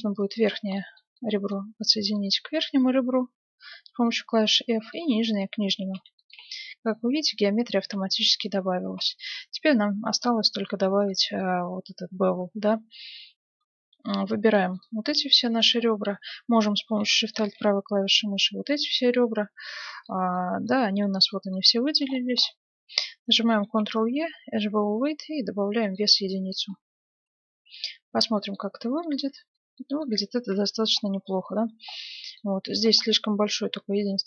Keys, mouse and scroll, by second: 0.1-1.7 right drag, 0.7-2.9 middle drag, 2.1-3.9 right drag, 3.5 f, 4.4-7.9 right drag, 4.9-6.5 middle drag, 6.4 f, 7.4-10.1 middle drag, 8.8 ctrl+Tab, 11.0-12.7 right drag, 14.4-16.6 right drag, 17.1-18.7 right drag, 18.7-23.2 middle drag, 23.2-23.7 scroll up 1, 23.7 ctrl+e, 23.7 middle click, 26.7-34.2 middle drag, 27.1 Tab, 30.6 KP_7, 32.5 Tab, 33.4-34.2 right drag.